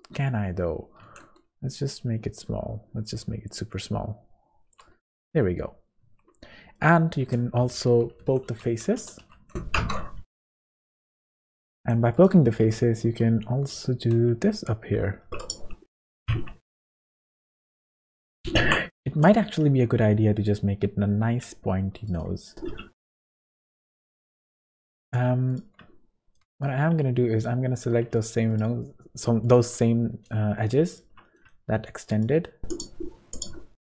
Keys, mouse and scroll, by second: 1.0 s, 5.3 Tab, 5.8 scroll up 4, 6.0 Tab, 6.8 middle click, 7.2 space, 10.8 Tab, 11.5 Tab, 11.8 1, 12.1 click, 12.6 g, 16.0-16.3 scroll down 4, 16.3 Tab, 16.7-17.0 scroll down 2, 17.4-17.9 scroll up 8, 17.9 shift+middle click, 18.3 scroll up 2, 18.6 Tab, 19.1 g, 22.1 click, 23.1 middle click, 23.8 middle click, 25.0 2, 25.5 shift+click, 26.6 middle click, 27.3 shift+click, 28.1 shift+click, 29.4 shift+click, 29.8 middle click, 30.9 shift+click, 31.2 middle click, 32.1 shift+click, 32.7 shift+click.